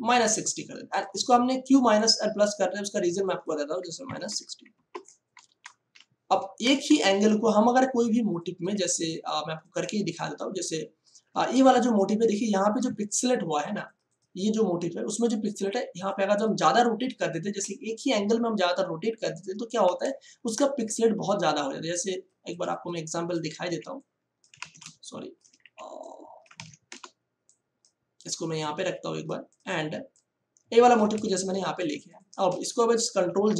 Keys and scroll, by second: 4.0 KP_Subtract, 4.2 6, 4.7 0, 5.4 Return, 7.6 ctrl+space, 11.6 ctrl+space, 12.8 ctrl+space, 14.2 space, 20.0 space, 23.6 b, 24.8 ctrl+space, 25.6 b, 26.8 v, 31.1 ctrl+space, 33.1 ctrl+j, 33.4 ctrl+t.